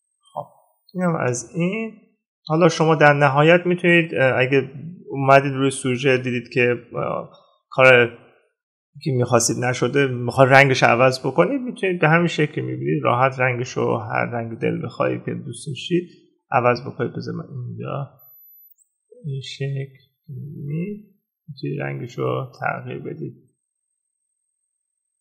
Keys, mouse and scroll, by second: 1.1 ctrl+-.